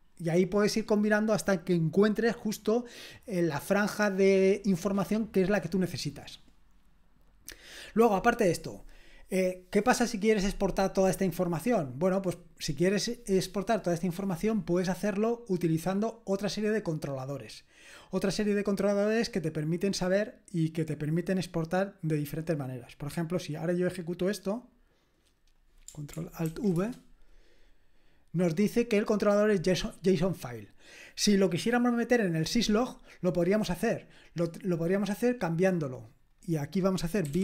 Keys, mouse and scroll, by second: 6.6-15.6 scroll down 3, 15.6 scroll down 1, 18.7 scroll down 1, 22.7-24.9 drag, 25.0 click, 25.5 click, 26.4 ctrl+alt+v, 26.8 Return, 33.6 scroll down 1, 36.3-37.3 drag, 37.0-37.4 typing.